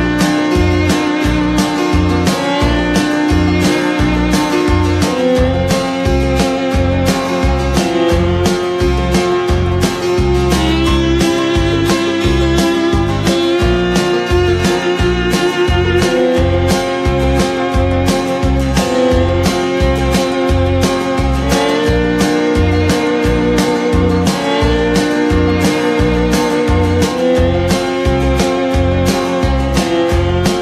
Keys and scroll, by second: 15.3 Delete.